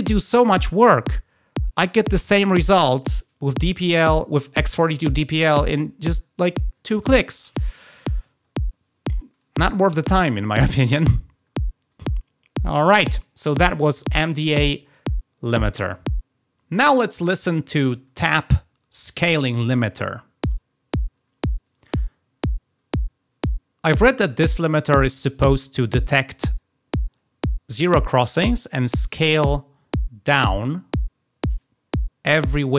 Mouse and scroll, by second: 2.9 click, 13.9 click.